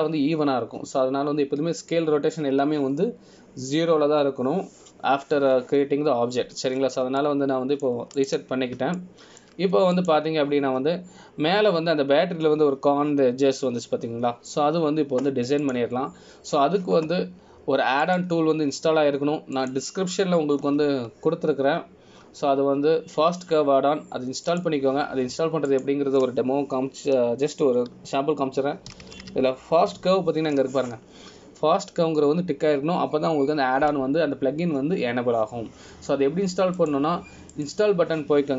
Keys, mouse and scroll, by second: 8.9-9.3 scroll up 1, 9.3 middle click, 10.3 click, 11.1 shift+middle click, 12.1 click, 17.8 click, 20.2 click.